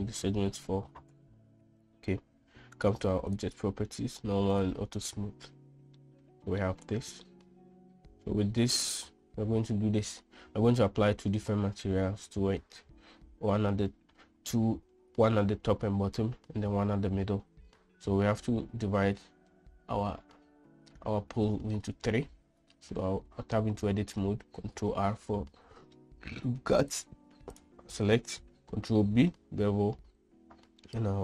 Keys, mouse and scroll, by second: 3.8 click, 5.1 click, 6.5-7.1 middle drag, 7.8-9.0 middle drag, 9.1 middle click, 22.7 Tab, 25.1 ctrl+r, 28.1 ctrl+r, 29.4 ctrl+b.